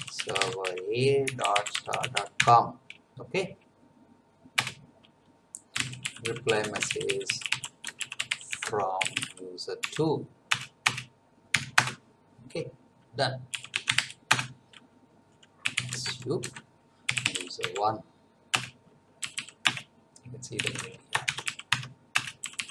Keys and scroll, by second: 0.0-2.9 typing, 4.6 Return, 5.5-9.8 typing, 10.5 Return, 11.5 ., 11.7 Return, 13.2-18.1 typing, 18.5 Return, 19.2 l, 19.6 Return, 20.3-22.7 typing, 22.1 Return.